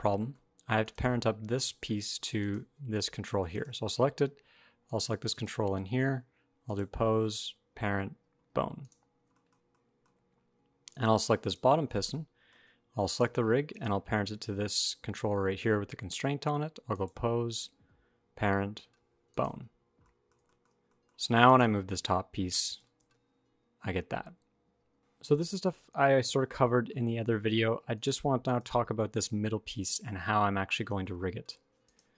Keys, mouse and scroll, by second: 0.0 shift+middle click, 0.2-0.6 scroll up 1, 0.6 click, 2.1 shift+click, 3.2 click, 4.0 scroll up 1, 4.6 shift+click, 5.1 shift+click, 6.4 click, 8.8-9.3 scroll down 4, 9.3 shift+middle click, 9.4-10.7 scroll up 4, 9.8 middle click, 10.7 click, 11.2 click, 11.8 shift+middle click, 12.0 middle click, 12.8 shift+click, 13.4 click, 16.7 click, 19.5 scroll down 6, 19.8 middle click, 20.2 shift+middle click, 20.4 shift+scroll up 2, 20.6 middle click, 21.2 click, 22.5 g, 25.0 shift+Tab, 26.0 alt+r, 26.1 alt+g, 26.4 middle click, 27.0 shift+middle click, 27.0 scroll up 1, 27.2 middle click, 27.7 click, 28.2 click, 30.8 shift+middle click, 30.9 middle click, 31.6 click.